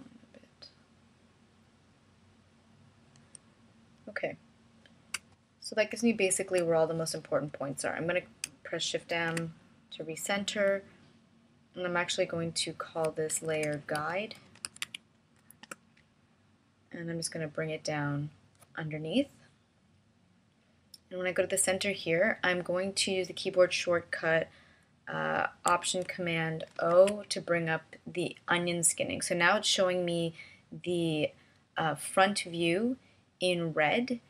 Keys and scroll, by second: 6.1 space, 10.5 shift+m, 14.5 BackSpace, 14.9 g, 15.2 u, 16.6 Return, 27.6 alt+super+o.